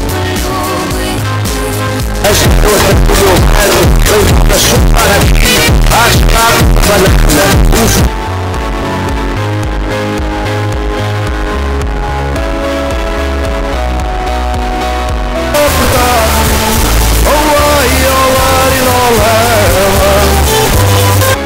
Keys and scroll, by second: 8.3 Page_Down.